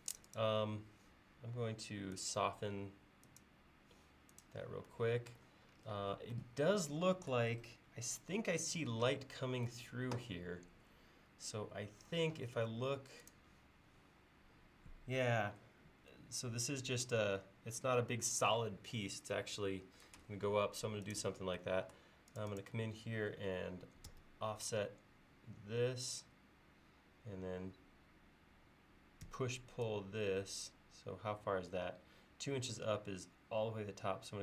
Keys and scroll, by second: 24.2 f, 29.3 p.